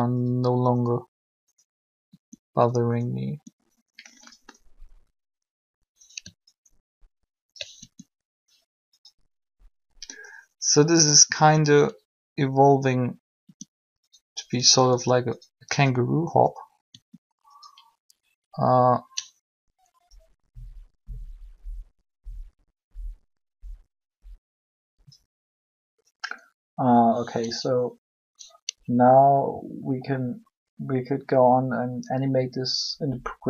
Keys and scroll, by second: 2.1 r, 7.8 ctrl+r, 13.4 r, 16.9 r.